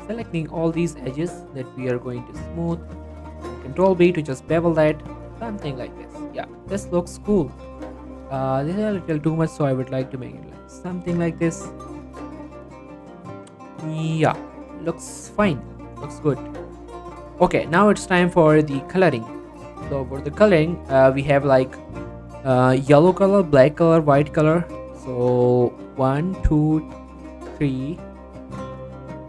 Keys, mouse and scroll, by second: 0.6 shift+click, 0.9 middle click, 2.0 shift+click, 3.8 ctrl+b, 5.4 click, 5.5 Tab, 5.7 scroll down 1, 5.8 middle click, 6.3 click, 6.6 middle click, 7.7 scroll up 1, 8.0 click, 9.1-9.4 typing, 11.2 click, 11.4 scroll down 1, 11.6 middle click, 12.0 scroll down 1, 12.4 click, 13.3-13.9 scroll down 1, 14.0 middle click, 14.6 scroll up 1, 14.9 middle click, 16.4-16.7 scroll down 1, 16.7 middle click, 18.6 click, 19.6 middle click, 20.0 shift+middle click, 20.2 scroll up 1, 20.3 middle click, 20.6 shift+middle click.